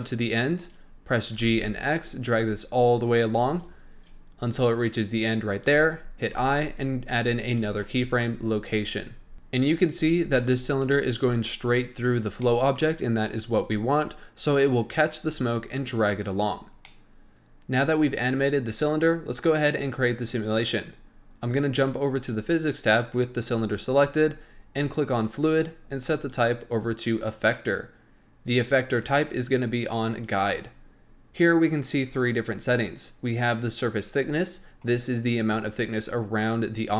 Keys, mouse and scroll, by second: 1.3 g, 9.3-9.9 scroll up 1, 9.9-10.3 scroll up 2, 10.3-15.1 shift+middle drag, 15.1-16.4 scroll down 1, 16.4-16.8 scroll down 4, 16.8-17.3 middle drag, 22.1 click, 24.1-25.2 scroll up 6, 25.2 click, 26.1-32.0 drag.